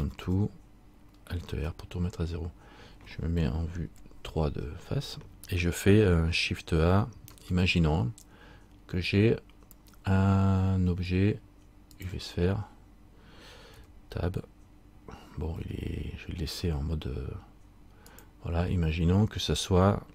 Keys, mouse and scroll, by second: 0.2 a, 1.6 alt+r, 4.0 KP_3, 7.5 shift+a, 13.9 Tab, 15.7 s.